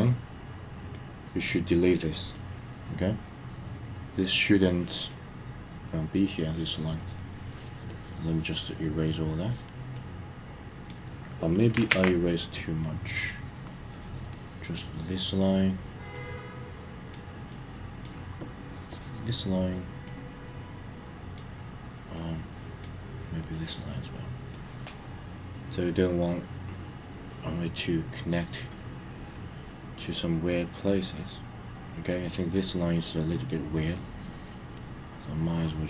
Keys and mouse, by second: 0.9 click, 2.3-4.6 middle drag, 5.1-6.3 middle drag, 6.5 click, 7.5 click, 9.9 middle click, 11.9 super+z, 12.8 middle click, 13.7 click, 13.8 click, 14.7 middle click, 16.1-17.2 middle drag, 17.5 middle click, 18.7 click, 20.1-21.4 middle drag, 22.2 middle click, 23.4 click, 24.5-28.4 middle drag, 28.6-32.1 middle drag, 32.3-33.5 middle drag, 33.9 click, 35.4 click.